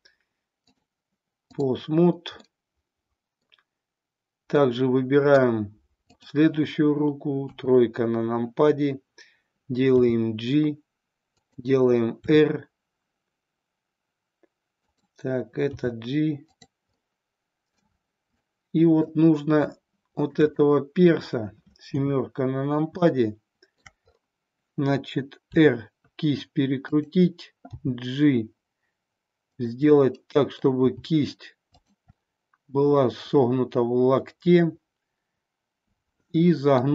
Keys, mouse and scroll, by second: 0.6-1.6 drag, 2.5-3.4 middle drag, 4.5-5.4 middle drag, 6.1 click, 8.1 KP_3, 10.0 g, 12.3 r, 14.9 click, 16.0 g, 16.5 click, 17.0-17.9 middle drag, 18.4-19.1 middle drag, 19.7-20.4 shift+middle drag, 20.5-21.0 middle drag, 21.0 scroll down 1, 21.9 KP_7, 23.0-23.8 middle drag, 25.5 r, 27.9 g, 29.9 middle click, 30.9 g, 32.3-36.9 middle drag.